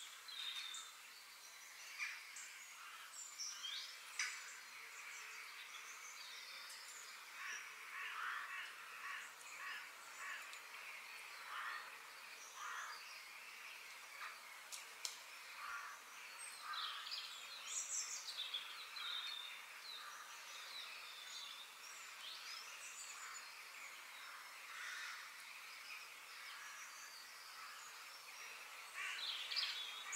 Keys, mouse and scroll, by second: 1.6 middle click, 2.0 scroll down 2, 2.3-4.2 middle drag, 10.1-12.0 middle drag, 19.2-21.1 middle drag, 22.3-24.3 middle drag, 25.6 f, 28.6 KP_3, 29.4-30.1 scroll up 3.